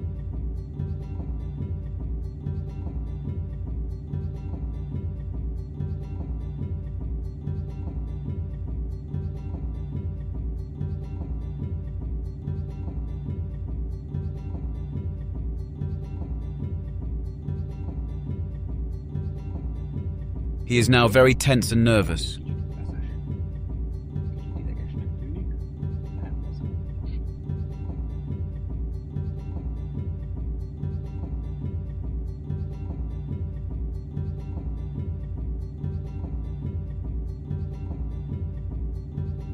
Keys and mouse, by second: 0.0 s, 3.8 click, 24.7 click, 27.2 s, 29.2-30.0 drag, 30.4-30.9 drag, 32.3 s.